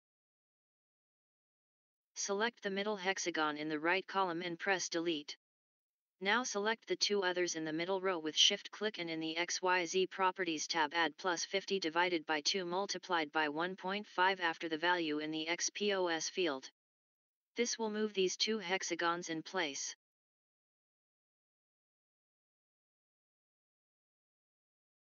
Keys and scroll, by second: 4.2 Delete, 17.2 typing, 18.3-19.8 typing, 21.3-23.9 typing, 24.8 Return.